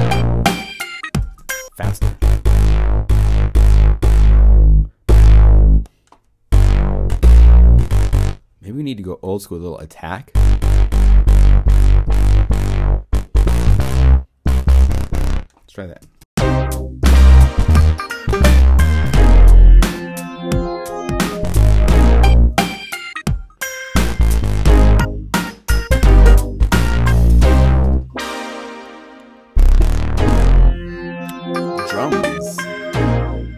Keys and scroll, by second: 1.3 0, 16.0 0.